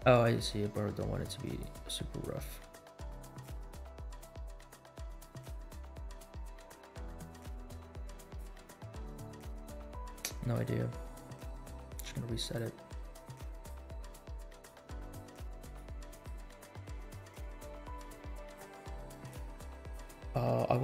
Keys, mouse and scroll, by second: 0.4-2.0 drag, 2.2-3.6 drag, 4.6-5.7 drag, 7.3-8.6 drag, 9.0-10.7 drag, 11.8-13.0 right drag, 13.1-14.1 right drag, 14.4-15.6 right drag, 15.6-17.2 right drag, 17.8-19.0 right drag, 19.2-20.4 right drag, 20.7-20.8 drag.